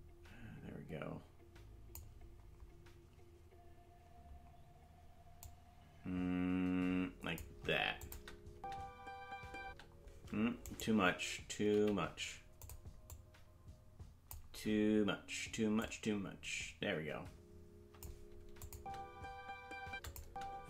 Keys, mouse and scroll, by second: 5.4-7.4 drag, 8.0 click, 8.5 space, 10.6-11.7 right drag, 10.6 space, 11.7 g, 13.0-14.3 drag, 15.7-18.0 drag, 18.6-19.8 drag, 18.7 space, 20.0 click, 20.0 space, 20.2 space.